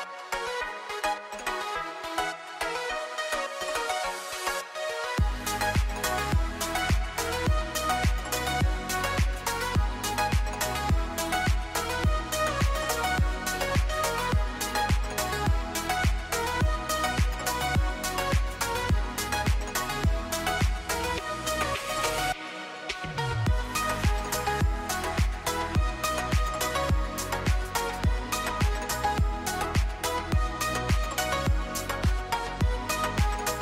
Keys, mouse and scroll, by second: 1.5 right click, 8.0-8.3 scroll up 1, 9.1 r, 9.2 click, 12.0-13.1 scroll down 1, 13.3 click, 14.5-17.0 scroll up 1, 18.0 1, 18.6 scroll up 1, 18.8 click, 22.0 click, 25.7 middle click, 25.9 Home, 26.3 scroll up 1, 26.5-27.4 scroll down 1.